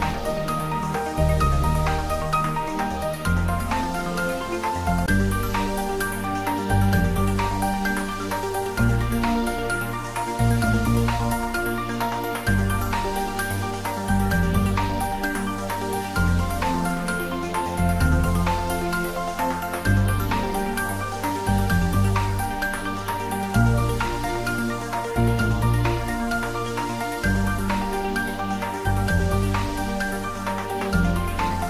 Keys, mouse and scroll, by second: 2.4-5.8 drag, 5.8-6.9 scroll down 1, 8.9-12.8 drag, 20.2 Tab, 24.9 click.